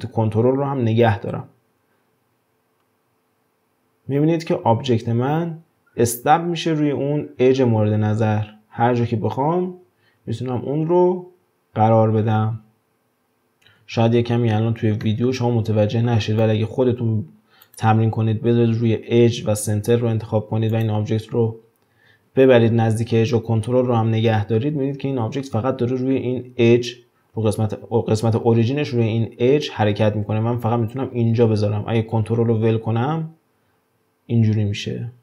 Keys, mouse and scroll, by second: 13.6-15.0 scroll up 8, 13.7 ctrl+z, 15.0-16.7 middle drag, 16.7-17.6 scroll down 1, 17.6-20.7 drag, 22.0 g.